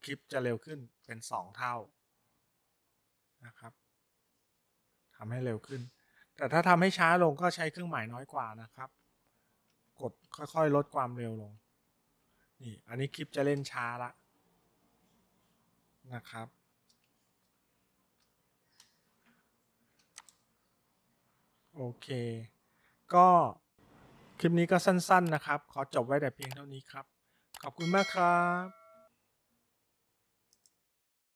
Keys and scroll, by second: 0.3 >, 8.4 shift+,, 9.1 <, 10.3 <, 11.0 <, 11.7 <, 12.3 <, 17.0 >, 17.5 >, 18.3 >.